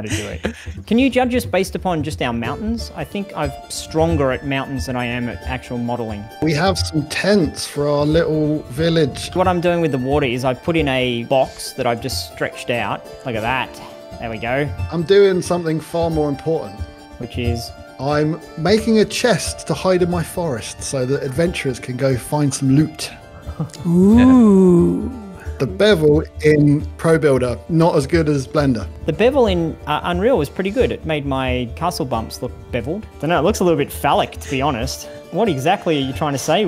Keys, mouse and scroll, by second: 0.3 shift+middle click, 33.1 middle click, 33.4-33.9 scroll up 3, 33.9-35.0 middle drag, 35.0-35.3 scroll down 3, 35.3-36.6 middle drag.